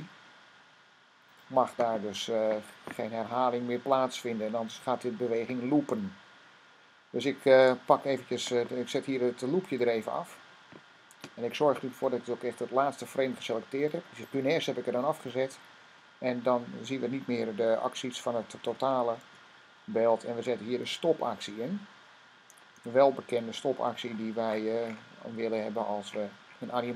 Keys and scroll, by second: 17.9-20.9 typing, 22.7 typing, 23.9-26.5 typing.